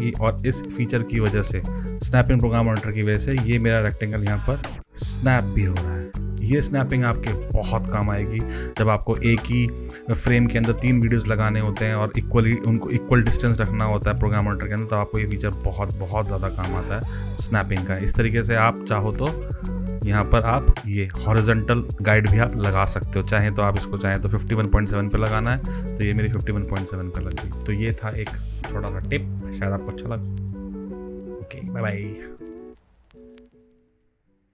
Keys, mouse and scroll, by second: 0.4 click, 3.1 click, 17.0 click, 18.9 right click, 19.9 click, 20.8 click, 21.7 click, 23.1 click, 25.4 click.